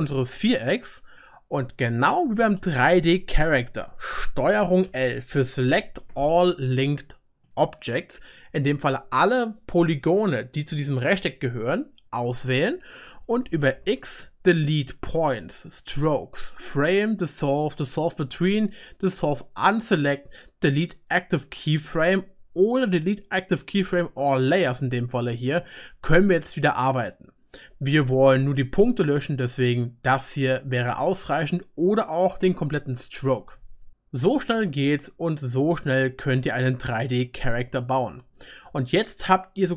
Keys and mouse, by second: 3.0 middle click, 4.8 ctrl+l, 7.9-13.7 middle drag, 13.7 x, 19.9-27.3 middle drag, 33.3 Delete, 33.9-39.7 drag, 33.9-39.7 middle drag.